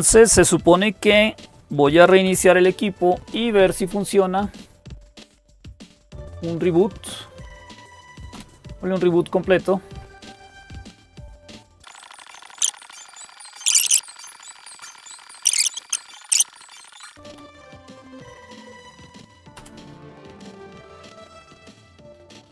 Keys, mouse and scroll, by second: 13.1-22.5 drag.